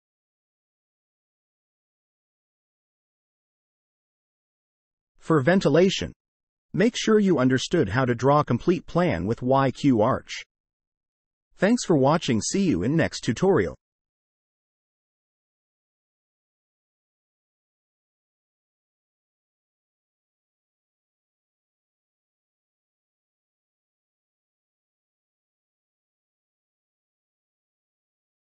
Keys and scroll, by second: 1.0 c, 1.1 space, 4.2 Escape, 4.7 t, 4.8 space, 6.1 Escape, 7.6 Delete, 8.2 space, 9.2 space, 10.1 Escape, 11.0 Escape, 12.4 Escape, 14.0 m, 14.2 space, 21.5 Escape, 24.4 Escape.